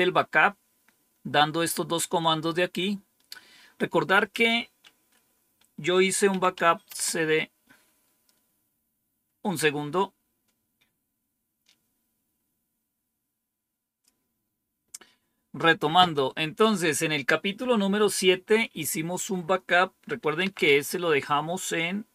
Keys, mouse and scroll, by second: 2.1-3.0 scroll down 2, 3.2-3.8 scroll up 2, 3.8 scroll up 1, 4.1 click, 6.0-6.9 typing, 13.9 click, 20.1-21.1 typing.